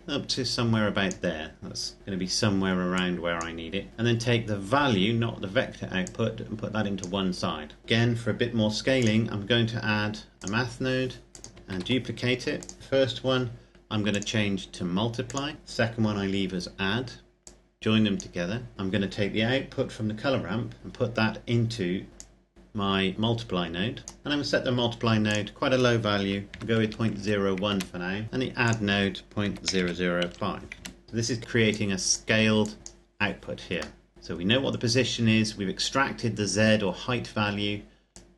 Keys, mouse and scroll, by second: 2.7 click, 5.8 click, 7.8 middle click, 8.7 click, 11.7 shift+d, 12.3 click, 13.8 click, 17.2 click, 22.1 click, 25.0 click, 26.4 KP_Decimal, 26.6 KP_0, 26.9 KP_1, 27.6 KP_Enter, 29.2 KP_Decimal, 29.4 KP_0, 30.0 KP_5, 30.7 KP_Enter, 31.0 middle click, 31.5 click, 33.7 middle click, 34.1-35.0 scroll down 1, 37.9 click.